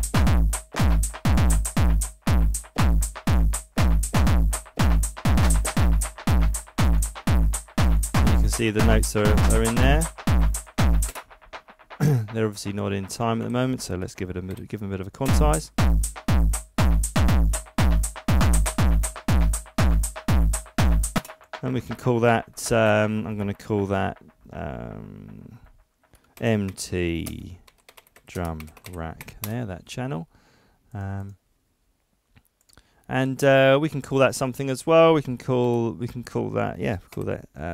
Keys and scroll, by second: 13.4 super+a, 14.5 super+u, 22.7 super+r, 26.3 shift+m, 26.7 shift+t, 27.6 shift+d, 28.6 shift+r, 29.4 Return, 35.6 super+r.